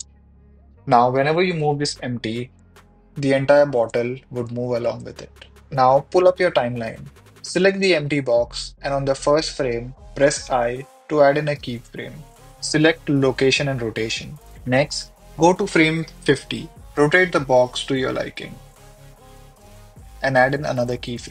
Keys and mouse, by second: 0.7 KP_1, 1.2 middle drag, 2.2 r, 2.2 r, 2.3 r, 4.4 Escape, 4.6 r, 4.7 r, 6.8 Escape, 14.5 click, 18.0 r, 18.2 r.